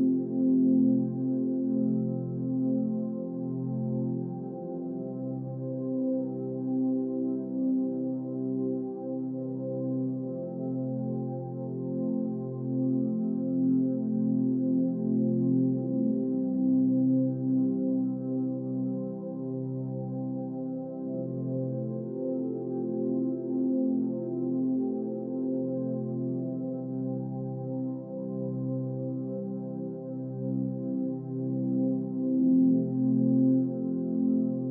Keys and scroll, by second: 0.0 Left, 0.4 Down, 6.6 ctrl+c, 11.6 Up, 11.7 Left, 17.4 Left, 17.5 Up, 18.1 Left, 22.7 Right, 22.8 Up, 22.9 Right, 23.0 Up, 23.4 Left, 23.5 Down, 25.1 Left, 25.2 Up, 25.4 Left, 25.8 Up, 26.0 Right, 26.1 Up, 26.2 Right, 26.3 Up, 26.3 Right, 26.6 Up, 26.7 Right, 26.8 Up, 28.9 Right, 29.0 Up, 29.1 Right, 29.8 Up, 29.8 Right, 29.9 Up, 30.2 Right, 30.3 Up, 30.4 Left, 30.5 Up, 30.7 Right, 30.8 Up, 30.9 Right, 30.9 Up, 31.0 Right, 31.2 Down.